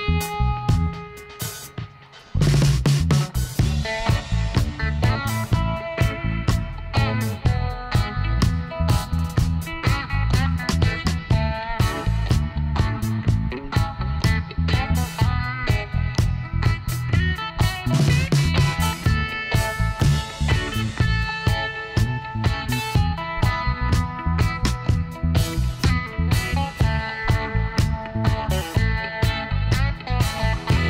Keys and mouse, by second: 3.0-7.2 middle drag, 5.8 e, 8.0 r, 9.1 middle click, 9.9 e, 13.3-14.9 drag, 15.6 f, 16.4-18.7 middle drag, 20.0 i, 20.9-22.7 drag, 28.7 ctrl+r, 30.3 s.